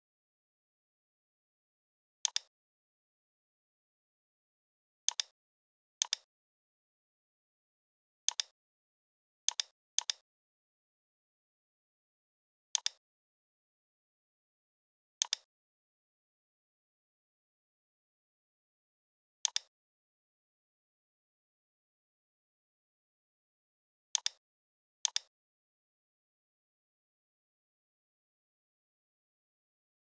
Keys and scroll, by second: 10.3 g.